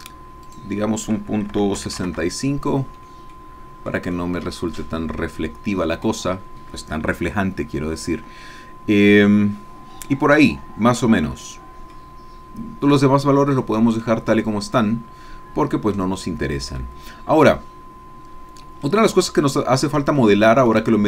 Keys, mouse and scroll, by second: 0.4 click, 1.5 KP_Decimal, 1.8 KP_6, 1.9 KP_5, 2.1 KP_Enter, 3.4-6.2 drag, 11.9-13.2 drag, 13.5-14.0 scroll down 1, 14.0-16.2 middle drag, 16.3-16.8 scroll down 1, 16.8 middle click, 18.1-18.9 scroll down 1, 18.9-20.2 middle drag, 20.2 shift+click, 20.9 shift+click.